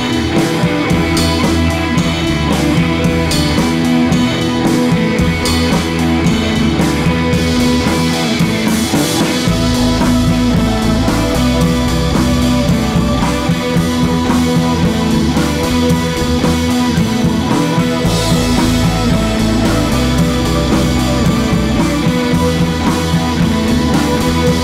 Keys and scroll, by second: 6.1 d.